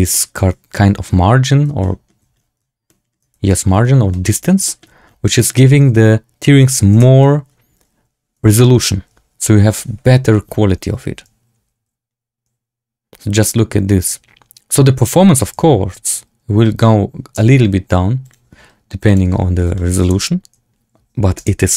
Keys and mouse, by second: 0.0 shift+middle drag, 1.7 shift+middle drag, 2.8 shift+middle drag, 3.4 shift+middle drag, 4.0 shift+drag, 4.1 shift+middle click, 4.6 shift+drag, 4.6 shift+middle drag, 5.3 shift+middle drag, 5.7 z, 6.8 space, 16.2 z, 17.3 space, 18.3-19.2 drag, 19.7 shift+click, 19.9 space.